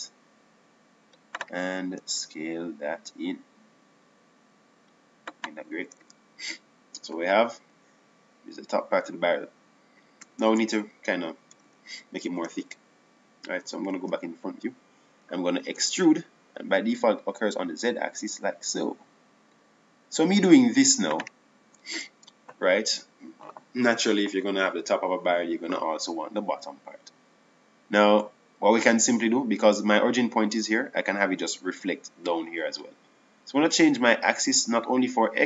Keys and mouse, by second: 0.5 e, 4.0 s, 7.9 Tab, 12.7 Tab, 13.8 a, 14.5 KP_1, 15.9 KP_1, 17.5 e, 23.9 Tab.